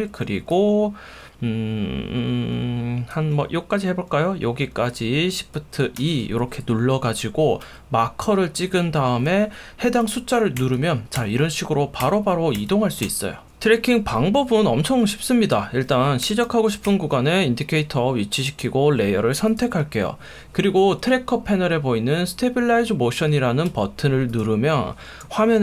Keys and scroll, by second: 6.0 shift+2, 16.3 2, 16.9 1, 24.4 F1.